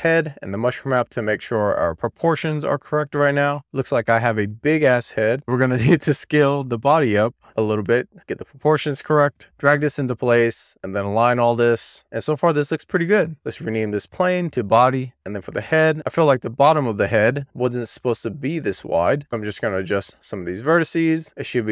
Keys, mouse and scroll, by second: 0.0 click, 0.5-1.3 scroll down 3, 1.3-1.9 scroll up 1, 1.9 middle click, 2.5-3.0 scroll down 1, 3.0 scroll up 1, 3.2-5.3 middle drag, 5.3 scroll up 2, 5.4 click, 5.8 Tab, 6.1 click, 6.3-6.6 scroll down 1, 6.6 click, 6.9 click, 7.7 click, 9.3 w, 9.8 click, 10.6 click, 10.8 w, 11.3 middle click, 12.3 middle click, 13.4-15.0 drag, 15.0 alt+middle click, 17.0-18.4 middle drag, 19.3 click, 19.4 click, 19.9 click, 20.7 click, 21.2 click, 21.5 click.